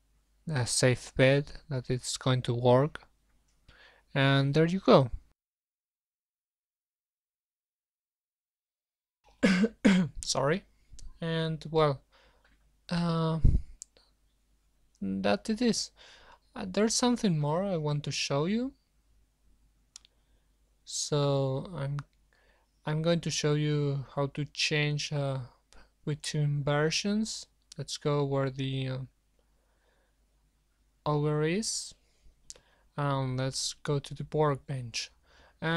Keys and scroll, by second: 20.0 super+1, 34.9 ctrl+s, 35.5 ctrl+s.